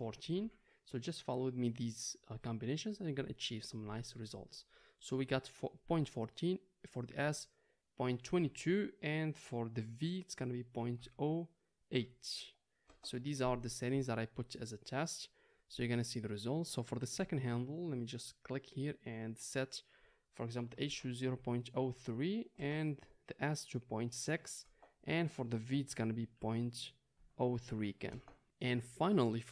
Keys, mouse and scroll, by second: 8.4 KP_2, 16.7-18.6 drag, 18.6-29.5 middle drag.